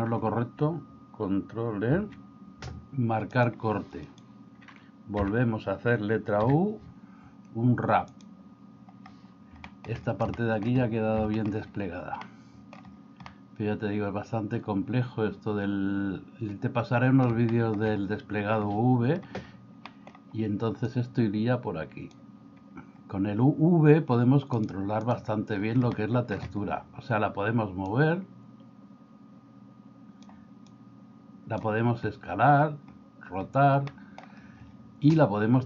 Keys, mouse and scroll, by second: 1.9 ctrl+e, 6.5 l, 6.5 u, 9.8 shift+middle click, 10.4 shift+middle click, 11.4 shift+middle click, 12.3 middle click, 13.3-17.2 middle drag, 17.6 shift+middle click, 19.9 middle click, 21.3-22.3 drag, 24.7 click, 26.0 shift+middle click, 27.9-30.3 drag, 30.8 click, 34.0 middle click.